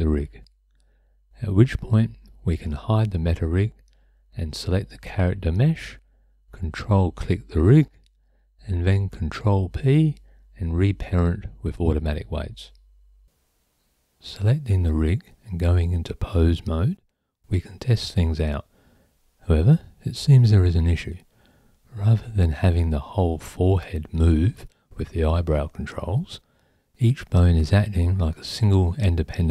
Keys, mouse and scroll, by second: 1.7 click, 3.9 ctrl+p, 11.2 Tab, 16.4-17.8 drag, 24.7 ctrl+z, 25.5 click.